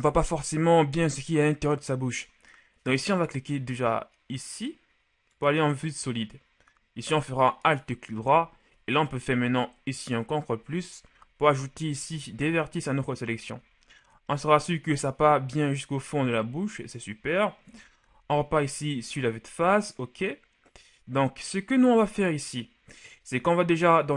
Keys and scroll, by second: 9.6 ctrl+KP_Add, 12.1 z, 17.8 KP_1, 18.2 z.